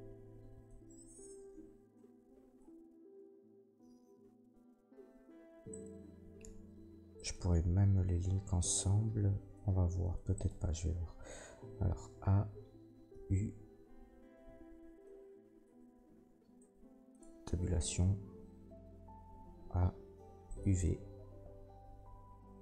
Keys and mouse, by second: 5.7 middle click, 5.7 right click, 7.1 shift+middle click, 7.1 shift+right click, 10.3 middle click, 10.5-22.6 drag, 11.8 a, 13.1 u, 14.4 u, 17.2 Tab, 18.9 a.